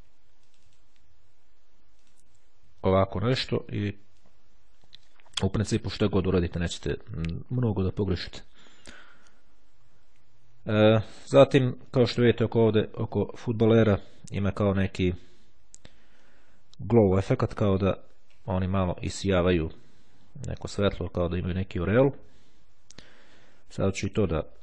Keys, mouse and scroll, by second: 0.6 click, 2.2 click, 4.2-7.7 drag, 9.5-10.3 scroll up 1, 11.5-12.0 scroll down 1, 12.0 click, 12.8-13.8 scroll up 1, 18.6-19.6 scroll up 2, 20.4-21.3 scroll down 2, 21.8 click, 22.9-23.5 scroll down 2, 24.1 click.